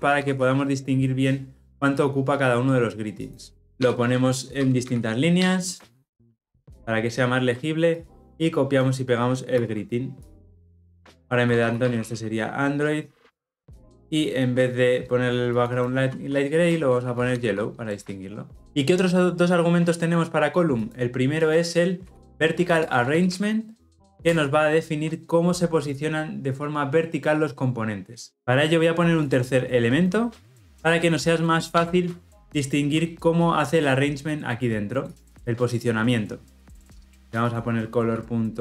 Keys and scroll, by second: 0.1 ctrl+alt+l, 0.3 ctrl+alt+o, 3.7 alt+Return, 5.9 ctrl+alt+l, 6.1 ctrl+alt+o, 10.1 ctrl+c, 17.8 Return, 24.2 Return, 30.6 ctrl+c, 31.9 ctrl+v.